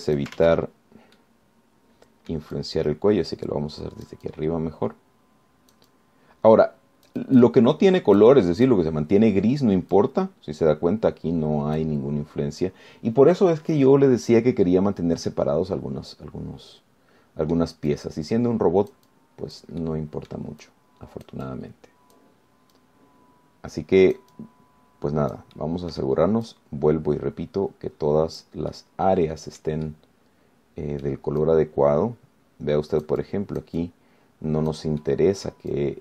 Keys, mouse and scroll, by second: 0.2 ctrl+click, 0.8 ctrl+z, 1.1 ctrl+click, 1.6 ctrl+z, 2.4-3.7 middle drag, 3.8-10.1 drag, 10.2-10.9 scroll down 2, 11.2-13.2 drag, 13.4 scroll up 1, 16.5-19.0 middle drag, 19.1-21.0 drag, 21.0 middle click, 21.8-23.6 drag, 24.0-26.8 drag, 26.8 middle click, 27.7-29.8 drag, 30.0 click, 30.2 scroll down 1, 31.1-32.4 drag, 32.6-36.0 drag.